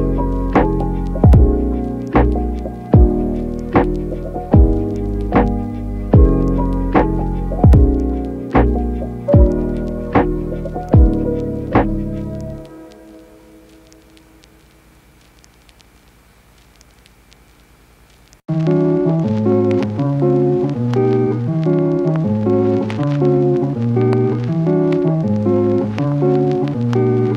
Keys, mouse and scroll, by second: 0.2 [, 0.3 click, 0.3 [, 0.6 ctrl+z, 0.7 click, 1.1 click, 1.5 [, 1.5 click, 2.7 ], 3.1 [, 3.3 ], 3.3 click, 3.5 click, 3.7 click, 4.5 ], 4.9 click, 5.1 [, 6.1 click, 7.3 click, 8.1 click, 9.5 click, 10.0 [, 10.2 [, 10.4 [, 10.8 ], 11.7 click, 12.1 [, 12.3 [, 12.6 click, 13.1 ], 13.7 click, 14.8 click, 14.9 click, 16.1 ], 16.3 ], 16.4 click, 16.7 click, 16.8 [, 18.1 ], 18.2 ], 19.3-21.5 typing, 19.9 ctrl+z, 22.0 click, 22.1 middle click, 23.0 click, 23.6 click, 26.4 Tab, 26.8 click, 27.1 click.